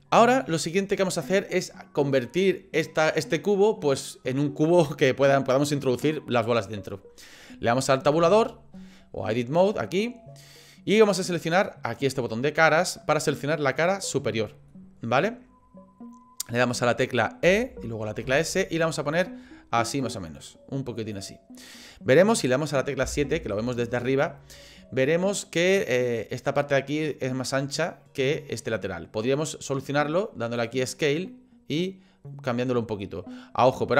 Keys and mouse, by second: 8.3 Tab, 12.6 click, 13.9 click, 14.7-16.4 middle drag, 17.4 e, 23.0 KP_7, 30.5 click, 30.5 typing, 31.8-33.9 drag.